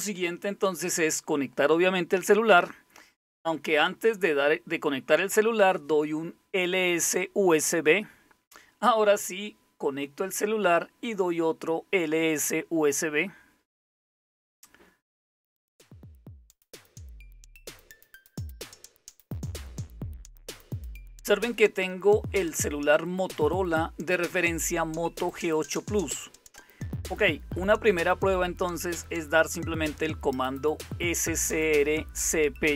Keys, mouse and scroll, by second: 0.3-3.3 typing, 3.4 Return, 16.5 click, 17.5-19.4 typing, 19.8 Return, 22.2-24.2 drag, 25.7 click, 26.3-27.6 typing, 26.5 click, 29.8-30.6 typing, 31.6 Return.